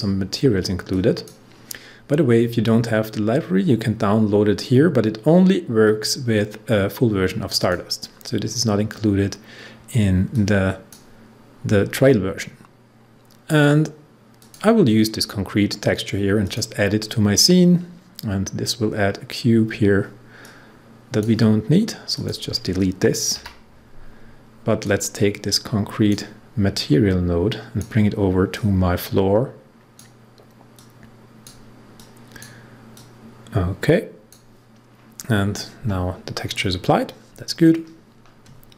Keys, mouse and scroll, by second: 10.2-13.3 drag, 14.3 click, 20.4-22.1 drag, 23.3 Delete, 24.8-36.8 drag.